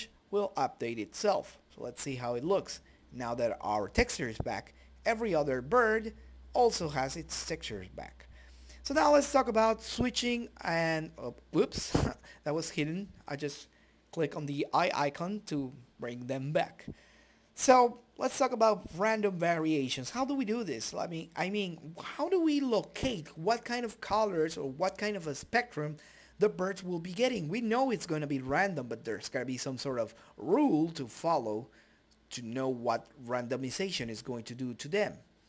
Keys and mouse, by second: 0.2 Tab, 1.3-2.6 middle drag, 3.4 a, 4.6 right click, 9.8 shift+z, 12.0 click, 13.9-14.9 drag, 15.9 click, 17.4 click, 19.6-21.1 drag, 21.3-22.4 drag, 25.1 a, 25.8 click, 26.1 middle click, 26.1 right click, 26.6 shift+a, 28.3 KP_Decimal, 28.7 right click, 28.9 middle click, 29.1 right click, 31.6 Tab, 32.6 2, 32.8 click, 33.5 ctrl+space, 34.1 right click.